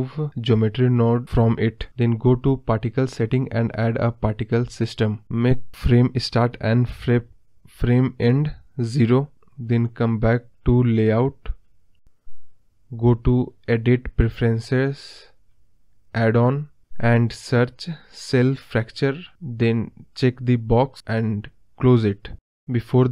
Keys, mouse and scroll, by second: 0.4-9.8 drag, 9.8 scroll up 2, 9.9 middle click, 10.2 scroll down 4, 10.4-14.7 middle drag, 14.7 click, 16.3-17.9 drag.